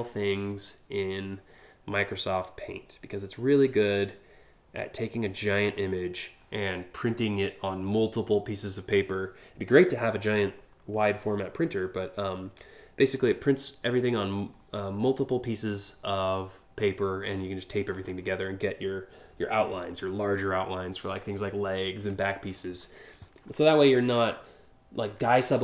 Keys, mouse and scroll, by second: 12.8 click.